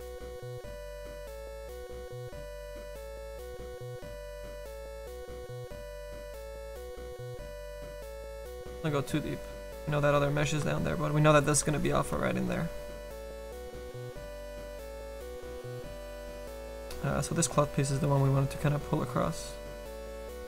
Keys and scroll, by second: 15.7 s, 16.7 s, 20.3 s.